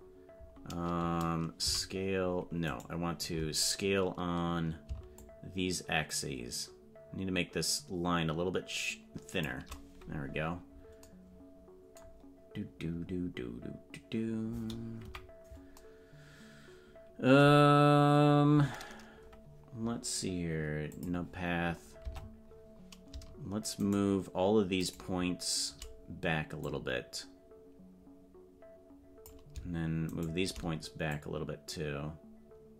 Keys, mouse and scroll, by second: 1.6 z, 5.1-9.4 shift+drag, 15.0 KP_Decimal, 20.9 click, 22.0 Tab, 23.8-25.7 shift+right drag, 26.6-29.2 drag, 30.1 shift+right click, 31.0-32.7 drag.